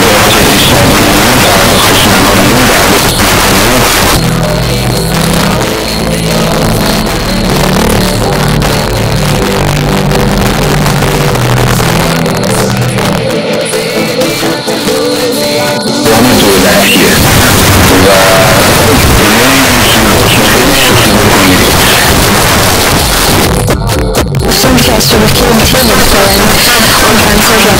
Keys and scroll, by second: 3.0 Page_Down, 22.2 Page_Down.